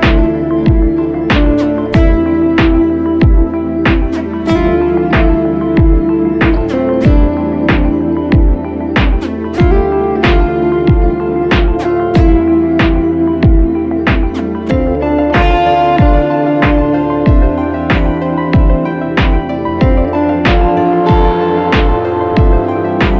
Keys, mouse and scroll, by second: 8.3 alt+shift+click, 22.4 Return.